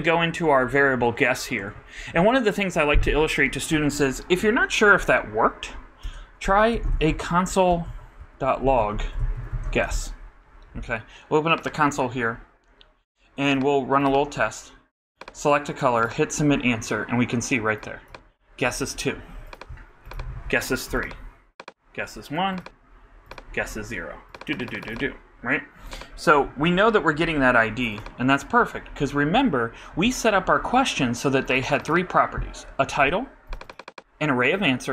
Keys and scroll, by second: 8.5-10.4 typing.